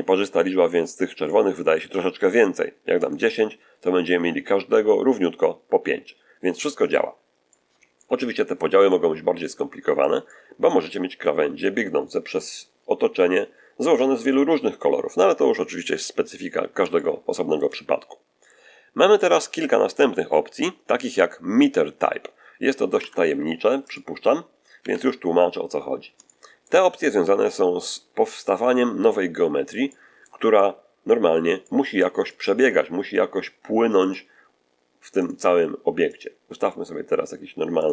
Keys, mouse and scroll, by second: 2.9 click, 6.4 scroll down 1, 7.4-8.6 middle drag, 8.8-10.1 middle drag, 16.5 scroll down 1, 16.8 shift+middle click, 22.9 Tab, 23.6 x, 23.8 click, 24.7 1, 25.8-26.1 scroll down 3, 26.1-26.7 shift+middle drag, 27.2 shift+a, 28.4 click, 29.8-30.3 middle drag, 30.4-31.2 middle drag, 31.5-32.1 middle drag, 32.2-32.7 shift+middle drag, 33.9 click, 35.1 click, 36.0 click, 37.7 click.